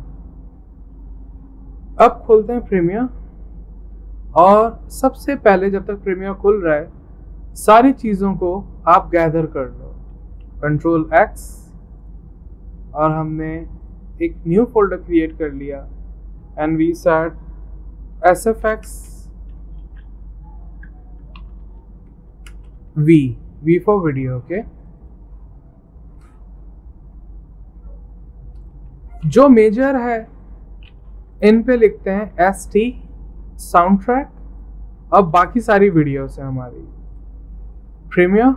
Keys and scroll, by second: 11.4 super+d, 18.7-19.4 typing, 19.9 ctrl+a, 20.5-22.5 typing, 24.4 typing, 26.3 ctrl+v, 31.9 F2.